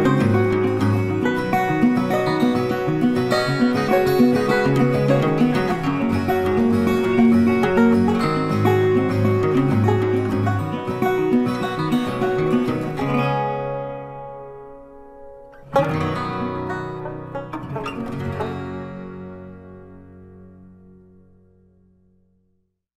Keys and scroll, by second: 2.5 ctrl+t.